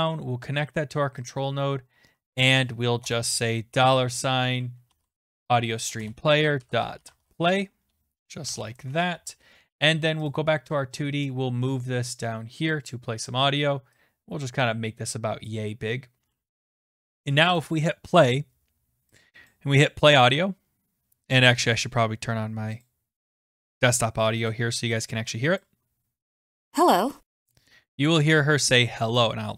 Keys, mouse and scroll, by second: 1.3 click, 2.0 scroll, 2.5 click, 3.0 Return, 3.0 scroll up 1, 3.7-8.9 typing, 10.3 click, 12.7 click, 14.4 click, 15.5 click, 17.6 click, 22.8 click, 25.6 click, 26.7 click.